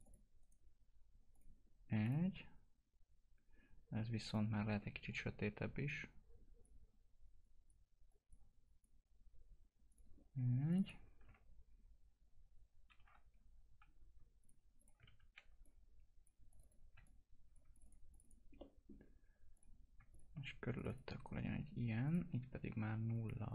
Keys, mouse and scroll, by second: 0.4 right click, 1.3-7.4 drag, 7.4 click, 14.4 click, 15.0 ctrl+d, 15.6 click, 17.0 shift+click, 18.6 middle click, 19.5 click, 21.2 right click, 22.0 click.